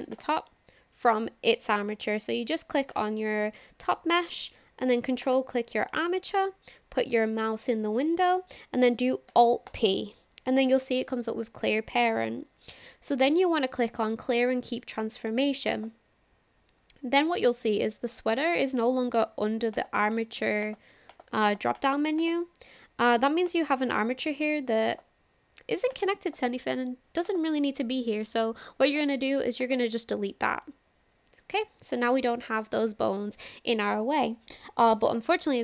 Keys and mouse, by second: 5.2 ctrl+click, 9.7 alt+p, 19.8 click, 20.6 click, 21.1 click, 21.5 click, 21.7 click, 23.6 click, 24.9 click, 25.9 click, 27.2 click, 28.9 click, 29.8 typing, 32.3 shift+middle click, 32.9-33.3 shift+middle drag, 35.0 click.